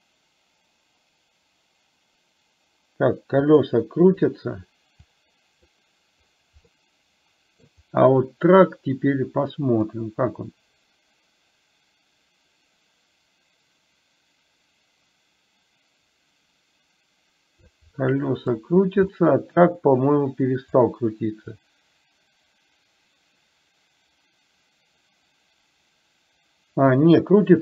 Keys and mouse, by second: 5.2 click, 6.8-7.8 middle drag, 10.1-17.9 drag, 18.1-18.6 middle drag, 19.2-19.6 shift+middle drag, 20.8-27.6 drag.